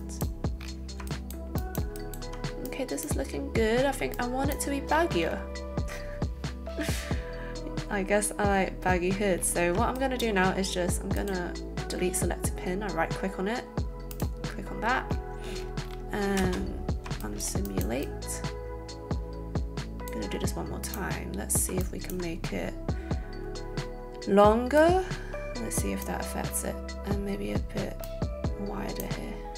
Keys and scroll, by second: 16.3 space, 17.0 alt+space.